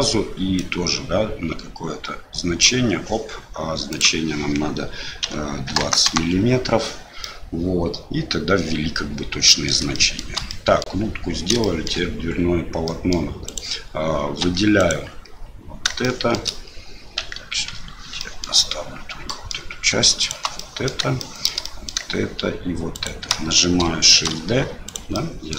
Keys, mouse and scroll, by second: 0.6-3.1 drag, 4.0-6.9 drag, 7.4-9.8 middle drag, 10.0 shift+middle click, 10.6 middle click, 11.7 shift+middle click, 12.8 middle click, 13.4 click, 14.4 2, 14.7 click, 16.0 shift+middle click, 17.2 KP_Divide, 18.1 middle click, 19.2 middle click, 20.2 shift+click, 20.5 middle click, 21.2 shift+middle click, 21.6 middle click, 22.9 shift+click, 24.1 shift+d, 25.3 click.